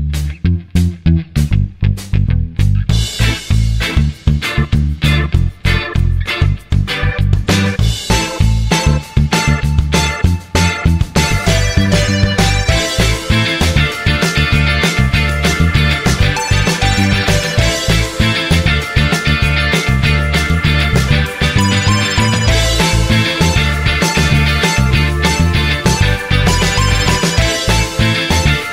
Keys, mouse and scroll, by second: 4.0 typing, 6.7 typing, 22.6-22.9 typing, 27.4 BackSpace.